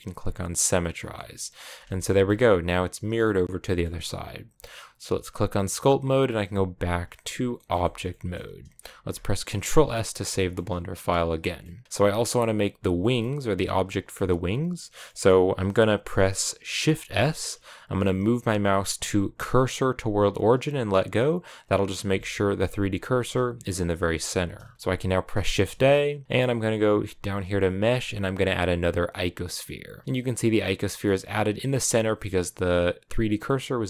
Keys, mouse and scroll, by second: 1.0 middle click, 1.5 scroll up 1, 1.7 shift+middle click, 2.1-3.1 scroll up 2, 3.1-6.9 middle drag, 6.9 click, 7.2 scroll down 2, 7.4-12.6 shift+middle drag, 12.6 scroll down 2, 12.8-15.1 middle drag, 15.1-20.7 scroll up 1, 21.5 click, 23.0 shift+s, 30.0 scroll down 2, 30.2-31.2 middle drag, 31.2-33.3 scroll up 3, 33.3-33.8 middle drag.